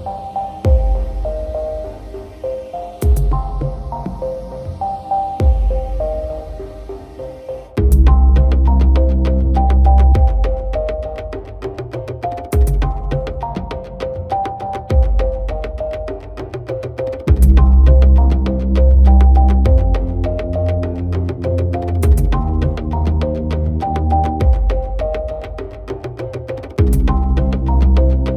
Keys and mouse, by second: 1.5 right click, 4.4 right click, 6.7 right click, 7.3 right click, 7.9 right click, 8.2 right click, 8.4 right click, 8.7 right click, 9.0 right click, 9.2 right click, 9.5 right click, 9.9 right click, 10.1 right click, 10.3 right click, 11.6 right click, 12.0 right click, 12.3 right click, 12.9 right click, 13.2 right click, 13.7 right click, 13.9 right click, 14.6 right click, 14.8 right click, 15.0 right click, 15.6 right click, 16.2 right click, 16.5 right click, 16.7 right click, 17.6 right click, 18.0 right click, 18.3 right click, 18.9 right click, 19.4 right click, 19.9 right click, 20.3 right click, 20.8 right click, 21.4 right click, 21.6 right click, 22.1 right click, 24.1 right click, 24.4 right click, 25.5 right click, 26.2 right click, 26.8 right click, 27.1 right click, 28.0 right click.